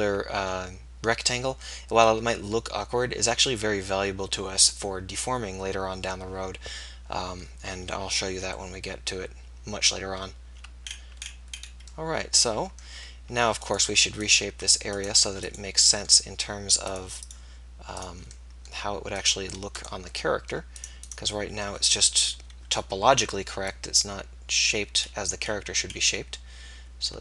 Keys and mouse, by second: 6.4 middle click, 7.3-8.3 middle drag, 13.8-17.0 right drag, 17.0 middle click, 19.2-22.3 middle drag, 22.3 KP_1.